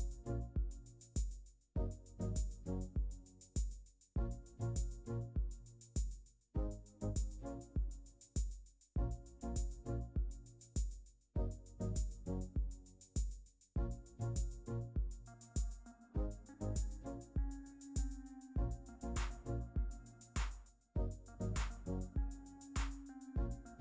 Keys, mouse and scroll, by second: 0.1 typing, 0.4 Return, 13.6 2, 18.4 1.